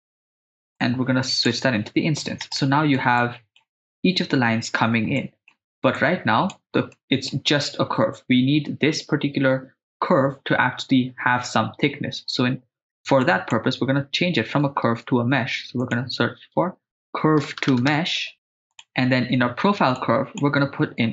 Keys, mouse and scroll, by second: 0.8 click, 2.7 middle click, 3.2-3.6 ctrl+middle drag, 5.2 middle click, 6.2 click, 6.9 middle click, 13.2 click, 14.9 shift+a, 20.0 click.